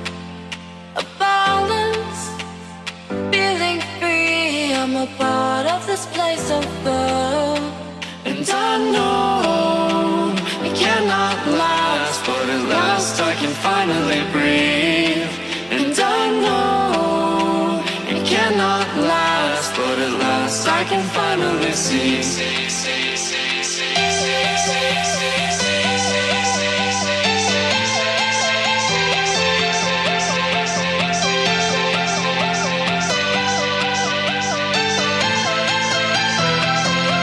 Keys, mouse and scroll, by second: 1.1 Return, 1.5 click, 4.6 Tab, 4.6 F10, 5.5 click, 6.0-7.0 typing, 7.7 click, 9.8 typing, 11.2 click, 15.3 F10, 15.8 click, 18.8-20.5 typing, 21.3 click, 22.7-23.9 typing, 25.1 click, 25.8-27.5 typing, 28.4 click, 29.6-30.9 typing, 32.3-35.1 typing, 35.8 click, 36.4 F10, 37.1 click.